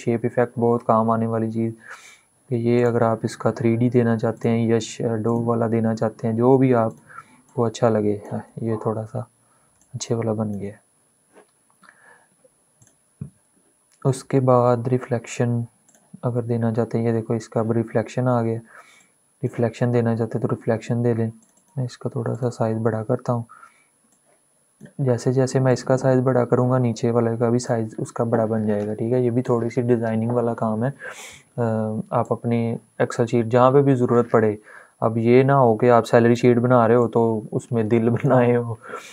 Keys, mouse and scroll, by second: 2.8-9.5 drag, 9.5-12.5 shift+drag, 15.7 click, 16.1 scroll down 1, 17.0 scroll up 1, 18.7-29.8 drag, 31.9-36.7 drag, 36.7-39.1 drag.